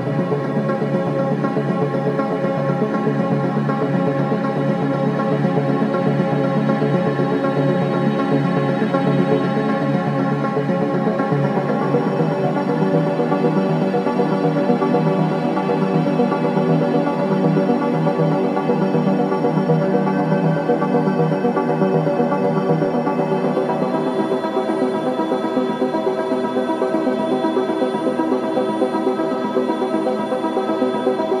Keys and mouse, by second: 0.0 click, 1.1 click, 1.6 click, 2.5 ctrl+s, 3.1 ctrl+alt+click, 4.2 t, 4.7-5.8 alt+drag, 5.7 ctrl+s, 6.6-7.8 drag, 7.3 space, 11.2 space, 12.3 ctrl+s, 13.8-14.5 drag, 14.9-15.7 drag, 17.4 alt+click, 19.5 click, 23.1-31.4 drag.